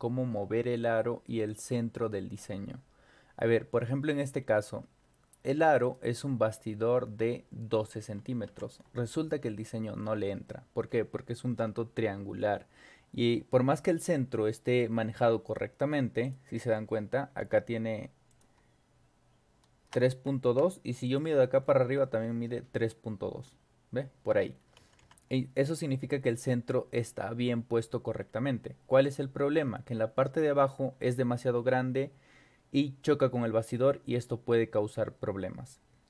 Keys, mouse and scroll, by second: 3.4 scroll down 2, 4.4 scroll down 2, 4.8 scroll up 2, 5.8 right click, 8.5 Escape, 10.3-10.6 scroll up 2, 13.9-14.2 scroll up 4, 14.2 scroll down 2, 14.8 click, 16.2 click, 16.7 middle click, 16.7-17.0 scroll up 2, 17.4 m, 18.3 click, 20.5 BackSpace, 21.1 click, 21.4 scroll down 2, 21.6 middle click, 21.6 scroll up 2, 24.4-24.7 ctrl+scroll up 2, 24.8 Escape, 25.0 Escape, 25.3 scroll up 2, 26.3 scroll up 2, 28.2-28.6 scroll down 2, 29.0 scroll up 2.